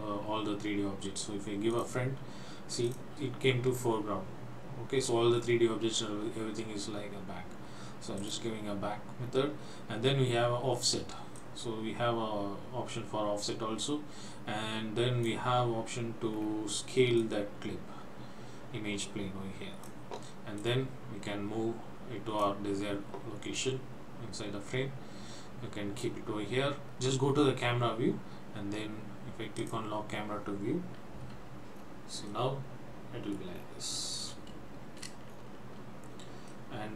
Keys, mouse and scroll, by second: 1.8 click, 3.0 click, 8.2 click, 9.3 scroll down 1, 11.4 click, 16.3-17.2 scroll down 2, 17.2 click, 20.6 click, 23.6 click, 26.9 click, 29.6 click, 31.4 n, 31.8-32.4 scroll up 2, 32.4 middle click, 33.6 scroll down 2, 34.3 middle click, 35.8-36.4 shift+scroll up 2, 36.6 middle click.